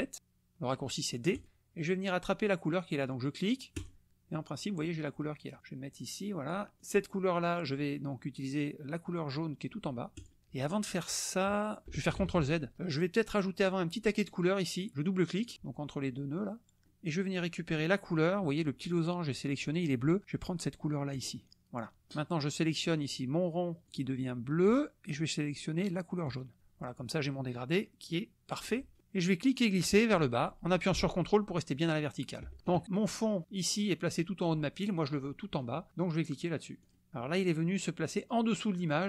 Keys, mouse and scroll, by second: 1.4 click, 3.7 click, 5.6-6.7 drag, 6.8 click, 10.1 click, 12.2 ctrl+z, 13.6 click, 15.5 click, 18.2 click, 21.1 click, 23.9 click, 26.3 click, 28.6 click, 29.6-32.5 drag, 36.8 click.